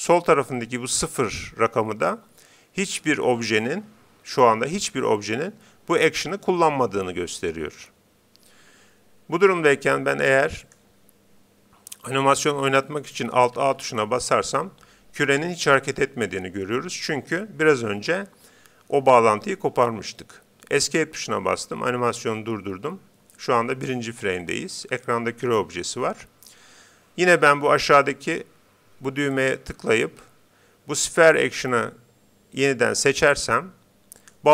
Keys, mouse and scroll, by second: 13.6 alt+a, 20.9 Escape, 29.3-31.0 drag.